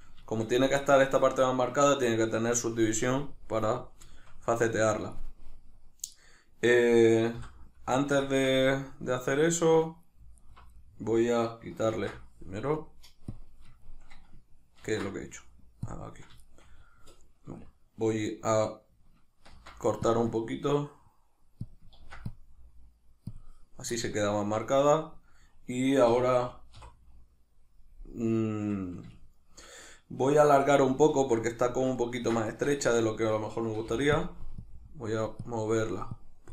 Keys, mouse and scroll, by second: 6.2 right click, 7.4 l, 8.0-10.4 ctrl+shift+middle drag, 10.4 alt+right click, 10.8-13.3 middle drag, 11.9 ctrl+e, 14.8 ctrl+e, 16.4 shift+middle click, 19.5 ctrl+r, 20.3-21.7 middle drag, 21.7 click, 22.0 ctrl+r, 23.4 click, 24.0 middle click, 26.1 a, 26.8 3, 29.6-34.2 shift+middle drag, 31.1 alt+q, 32.8 Tab, 33.9 f, 34.2 click.